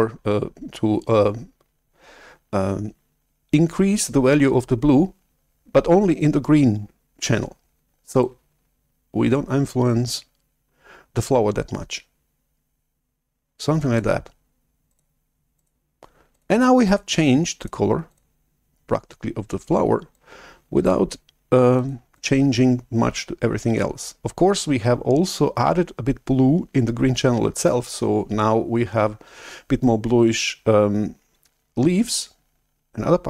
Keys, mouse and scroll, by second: 8.4 click, 14.8 click, 15.5 click, 16.2 click, 16.8 click, 17.5 click, 18.0 click, 20.2 click, 21.7 click, 22.1 click.